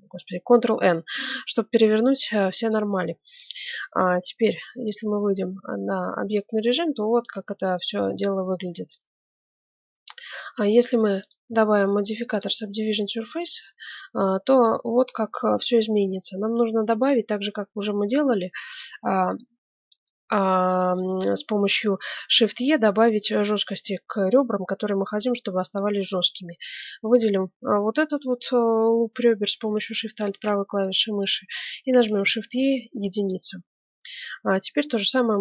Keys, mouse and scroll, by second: 1.0-2.9 middle drag, 3.0-6.9 middle drag, 4.2 Tab, 11.2-13.1 drag, 13.1-14.7 middle drag, 14.7 right click, 15.0-16.8 middle drag, 15.5 Tab, 16.8 ctrl+Tab, 18.2 ctrl+Tab, 19.2-20.7 right drag, 20.7 click, 21.2 middle click, 26.4-28.1 middle drag, 30.7 right click, 30.9 middle click, 32.1 click, 32.2 shift+e, 34.3-35.3 middle drag.